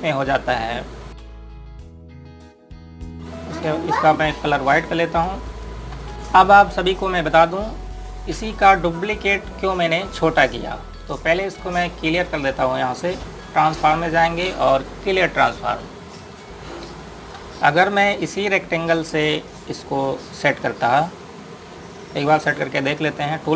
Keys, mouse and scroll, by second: 1.5 click, 3.2 scroll up 1, 4.3 click, 6.3 scroll down 1, 6.6 click, 12.9 click, 15.6 click, 17.0 click, 19.9 right click, 21.2 click.